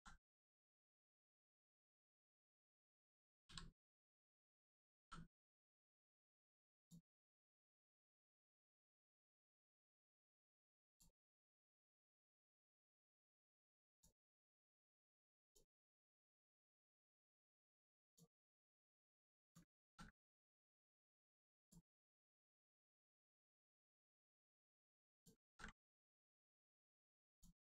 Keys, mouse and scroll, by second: 4.9 n, 6.7 click, 9.0 click, 13.2 click, 15.7 click, 19.0 click, 19.8 ctrl+z, 20.3 click, 22.8 click, 25.4 ctrl+z, 25.9 z, 26.0 click.